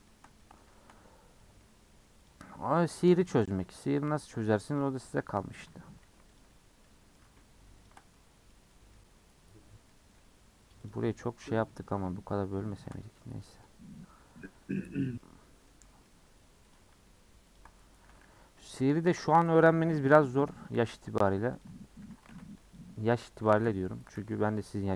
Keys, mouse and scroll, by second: 1.1-1.4 scroll up 4, 1.4 middle click, 2.3 click, 3.0 ctrl+click, 3.9 middle click, 4.6 scroll down 1, 4.8-6.4 middle drag, 6.8-7.8 middle drag, 7.8 alt+shift+click, 8.1-9.3 middle drag, 9.7 scroll down 3, 9.9 middle click, 10.2-10.9 scroll up 2, 10.9 alt+click, 11.5 alt+click, 11.7-12.8 middle drag, 12.8 alt+shift+click, 13.4 middle click, 13.8-14.4 scroll up 5, 14.4-16.7 middle drag, 16.7 click, 17.6 ctrl+click, 18.0 a, 18.7 u, 19.9 /, 20.5 Tab, 20.8 h, 21.6 click, 21.7 Tab, 22.0 3, 22.3 alt+z, 22.7 click, 22.9 middle click, 23.6 shift+click, 24.1 alt+z.